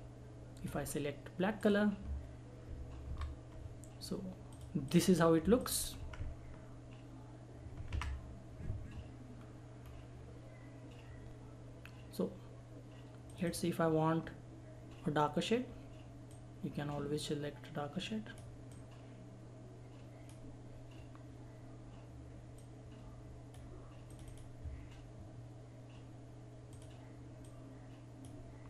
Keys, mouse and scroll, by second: 3.1 ctrl+End, 4.5 click, 4.5 click, 6.0 Left, 9.3-9.8 scroll down 1, 9.8 scroll up 1, 13.3 click, 16.3-23.5 drag, 26.8 click.